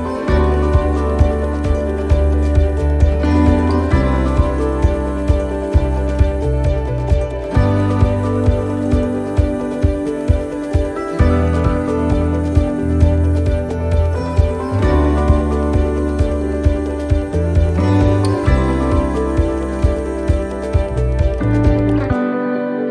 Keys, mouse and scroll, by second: 9.6 ctrl+z, 10.9 ctrl+r, 12.6 ctrl+r, 16.7 ctrl+r, 16.7 middle click, 17.9 shift+middle click, 20.8 shift+middle click.